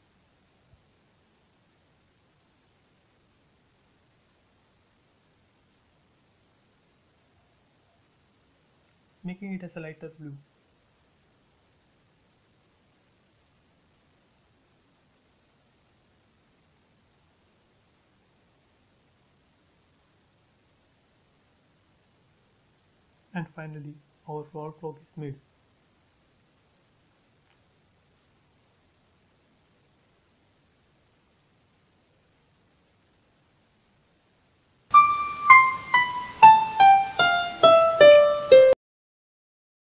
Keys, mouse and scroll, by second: 0.0 click, 1.0 scroll up 1, 1.9 b, 3.3 click, 6.7-7.2 scroll down 1, 9.2 scroll down 1, 17.6 click, 18.2 click, 19.1 space, 19.3 scroll down 1, 20.1 click, 20.2 click, 20.5-20.9 scroll up 1, 22.7 middle click, 23.4-23.8 scroll up 1, 24.4-28.4 middle drag, 28.4 scroll up 1, 29.2 middle click, 30.2 scroll up 1, 31.2-32.5 scroll down 1, 32.6-34.9 shift+middle drag.